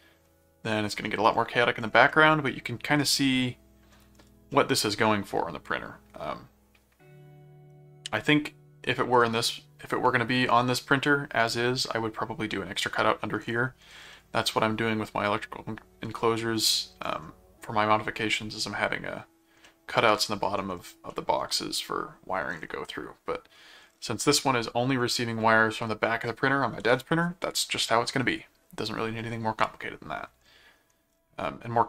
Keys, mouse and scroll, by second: 2.1-3.9 middle drag, 4.5-5.9 middle drag, 6.1-9.1 middle drag, 14.1-16.5 middle drag, 19.7 middle click, 21.1 middle click, 22.9 middle click, 24.2 middle click, 25.1-25.5 scroll up 2, 29.6 middle click.